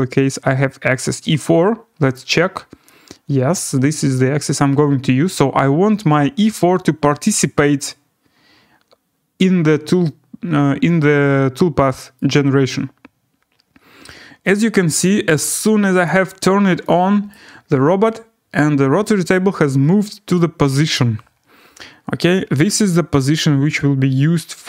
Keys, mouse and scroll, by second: 2.1 click, 2.5-3.3 scroll, 3.3 scroll down 7, 3.6-4.3 scroll, 6.6 click, 8.9-9.3 scroll, 12.1 right click, 15.0 right click, 16.0 click, 17.3 right click, 17.6-20.0 scroll.